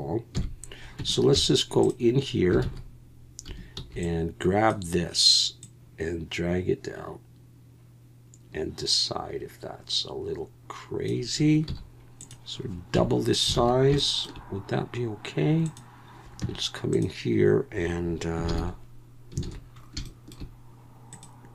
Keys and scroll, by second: 0.3 KP_1, 1.0 Tab, 1.3 z, 2.6 alt+a, 3.5 1, 3.8 b, 11.7 z, 12.9 Tab, 13.6 alt+a, 16.4 Tab, 18.5 ctrl+l, 19.4 alt+a.